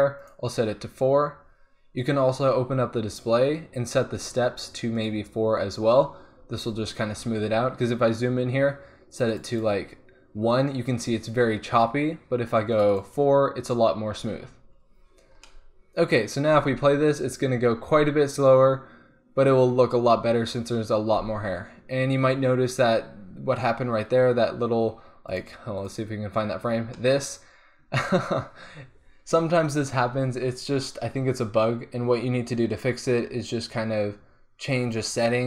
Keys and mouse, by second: 0.2-6.1 drag, 6.6-7.5 middle drag, 9.2-11.3 drag, 12.7 click, 13.0-14.6 drag, 14.7 click, 15.0-15.5 middle drag, 15.6 middle click, 15.8 middle click, 16.6 alt+a, 21.4 alt+a, 25.3-27.1 drag, 27.1 click, 29.4-31.4 middle drag, 32.7-34.4 drag, 34.9-35.4 drag.